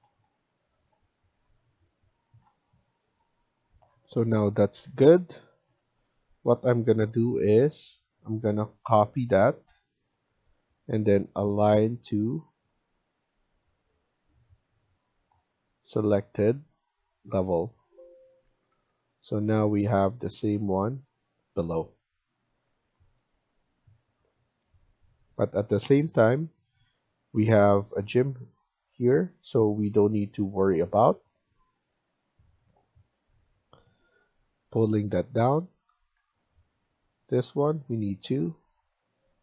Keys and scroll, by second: 4.6 Escape, 18.4 Escape, 18.6 Escape, 22.5 Escape, 22.8 Escape, 36.0 Escape, 38.8 Escape.